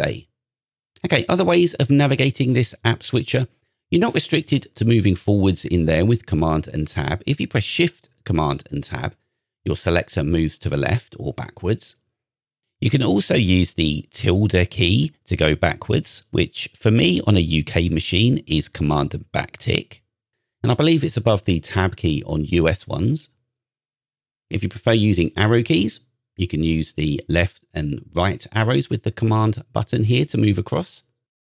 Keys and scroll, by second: 1.1 super+Tab, 8.2 shift+super+Tab, 11.0 super+Tab, 16.0 super+`, 17.6 super+`, 19.3 super+Tab, 21.0 super+`, 25.2 super+Tab, 25.6 super+Left, 26.1 super+Left, 26.8 super+Right, 27.4 super+Right, 30.1 super+Right.